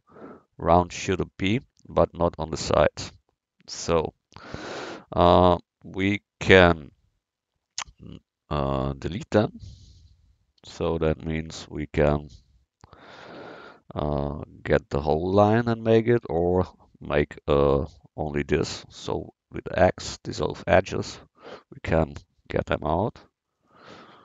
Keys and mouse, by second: 8.9-10.6 drag, 10.6 x, 12.5-14.0 drag, 19.0 x.